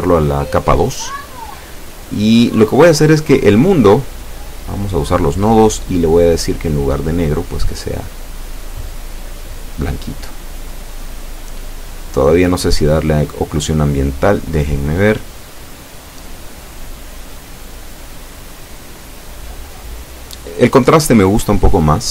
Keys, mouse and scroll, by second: 3.8 scroll up 2, 4.8 scroll down 2, 6.7 m, 7.1 2, 8.3-8.9 scroll up 2, 9.0 scroll down 2, 9.5 scroll up 2, 11.1 click, 12.0 click, 13.5 click, 13.5 scroll up 1, 14.6 click, 16.4-19.0 drag, 21.4 F12.